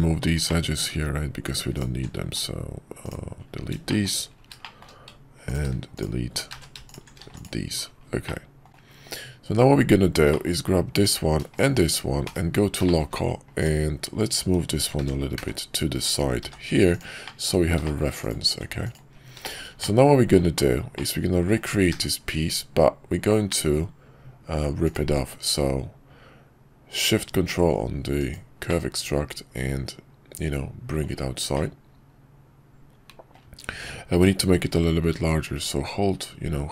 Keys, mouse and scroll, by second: 0.4 middle click, 1.7 alt+shift+click, 3.9 shift+middle click, 4.6 shift+middle click, 5.4 alt+click, 6.6 ctrl+z, 7.2 x, 8.2 middle click, 8.7 Tab, 8.7 /, 10.3 middle click, 12.8 middle click, 14.9 g, 17.2 middle click, 17.9 shift+middle click, 18.5 Tab, 18.8 click, 19.4 middle click, 19.8 middle click, 20.9 middle click, 21.9 q, 28.7-31.1 middle drag, 31.5-33.4 middle drag.